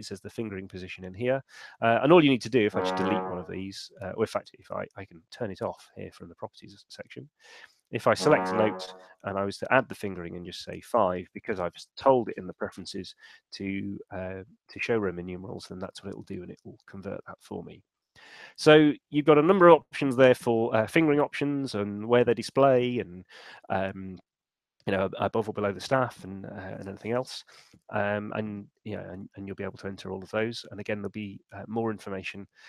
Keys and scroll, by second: 9.4 shift+f, 10.9 Return.